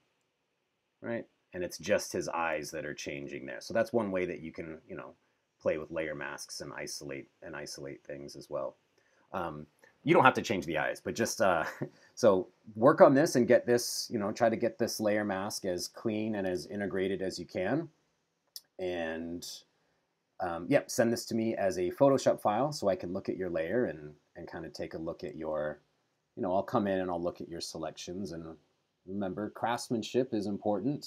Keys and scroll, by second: 0.5 super+-, 2.7 super+-, 16.5 BackSpace, 25.5 super+=, 27.9 super+=.